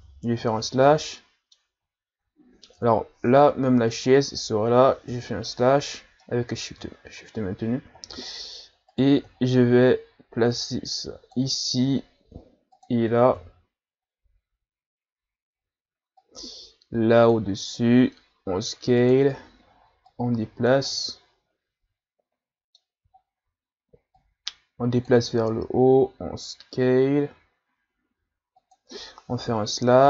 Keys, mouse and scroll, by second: 1.2-2.8 middle drag, 2.8 KP_Divide, 3.9 shift+right click, 5.1 KP_Divide, 6.2-7.0 middle drag, 7.0-7.4 scroll down 2, 7.4-8.0 scroll up 2, 8.0 scroll down 3, 8.3-8.9 middle drag, 8.9 right click, 9.4 scroll down 2, 9.9-10.5 scroll up 1, 10.5-11.9 drag, 11.9 s, 13.4 KP_3, 16.2-17.7 drag, 17.7 s, 20.1 click, 20.9-23.2 middle drag, 23.2-24.2 scroll down 2, 24.2-25.5 drag, 25.5 s, 29.5 KP_Divide.